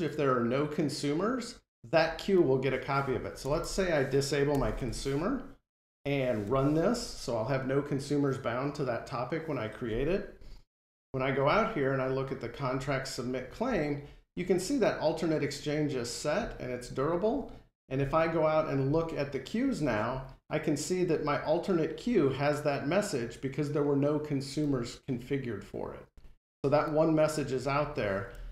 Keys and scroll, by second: 6.2 F5.